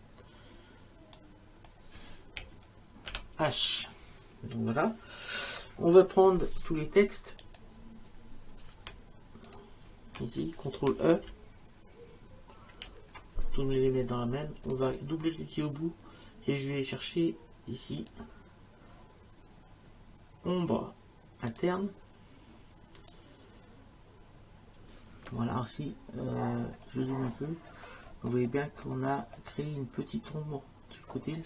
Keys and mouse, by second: 1.2 click, 3.1 shift+h, 7.4 click, 9.5 click, 12.7 ctrl+e, 14.7 click, 18.0 click, 21.5 click, 23.1 click.